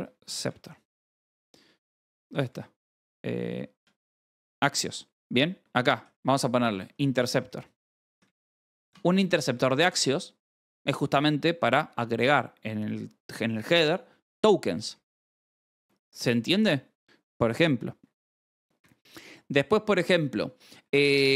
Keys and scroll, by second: 0.0-0.9 typing, 3.2-5.4 typing, 6.6-9.7 typing, 15.0 Escape, 15.1-17.0 typing, 20.7 k.